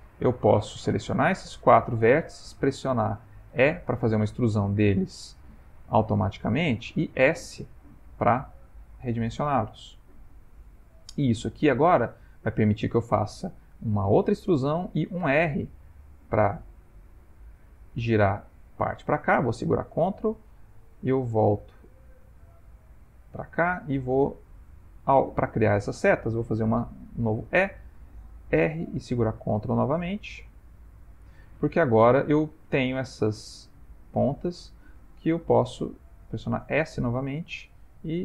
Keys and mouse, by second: 0.7 click, 1.5 click, 3.5 e, 7.2 s, 14.2 e, 20.8 click, 21.6 click, 23.6 shift+click, 24.7 shift+click, 25.8 shift+click, 26.9 e, 32.3 shift+click, 33.0 shift+click, 34.7 shift+click, 36.1 s.